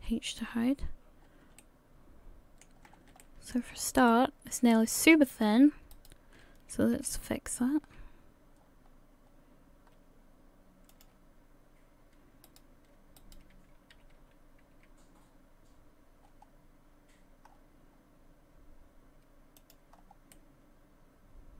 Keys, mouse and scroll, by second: 0.0 h, 0.5-1.2 scroll up 3, 1.2 scroll down 3, 1.5 scroll up 1, 1.6 middle click, 2.8-3.1 scroll up 2, 3.2 shift+middle click, 3.7-4.1 scroll up 2, 4.1 middle click, 5.3 right click, 5.9 shift+right click, 7.0 s, 12.5 right click, 13.2 shift+right click, 13.9 s, 19.9-20.3 scroll down 4, 20.3 middle click.